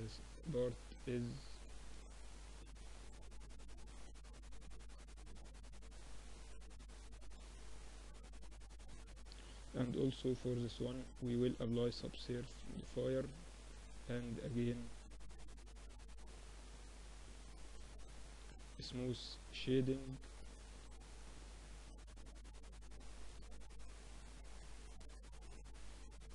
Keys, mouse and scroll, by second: 1.8 Tab, 2.7 ctrl+r, 4.9 Tab, 7.1 Tab, 7.7 Tab, 9.0 ctrl+2, 9.9 Tab, 10.8 ctrl+r, 12.5 ctrl+r, 14.4 ctrl+r, 16.0 Tab, 16.5-18.3 middle drag, 17.5 t, 18.3-20.2 drag, 18.4 t, 21.2 Tab, 25.7 Tab, 26.1 Tab.